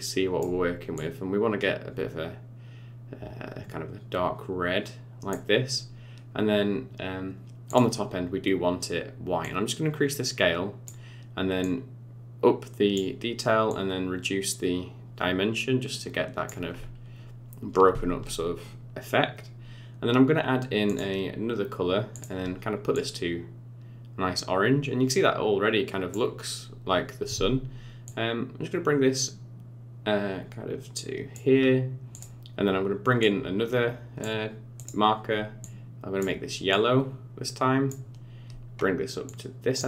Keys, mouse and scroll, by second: 7.6 click, 9.4 click, 11.6 click, 13.6 click, 16.7 scroll up 6, 18.6 scroll down 2, 20.8 click, 22.1 click, 28.0 click, 32.1 click, 33.2 click, 34.7 click, 39.2 click.